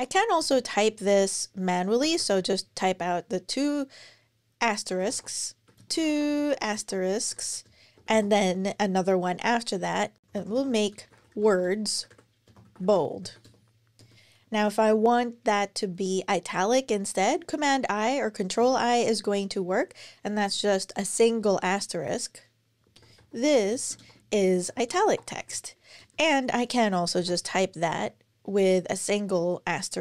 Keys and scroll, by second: 0.2 Return, 1.8 shift+8, 2.0 shift+8, 4.5-7.9 typing, 10.2 alt+BackSpace, 10.8-11.7 typing, 13.8 Return, 18.4 super+i, 22.5-25.8 typing, 27.0-27.8 typing.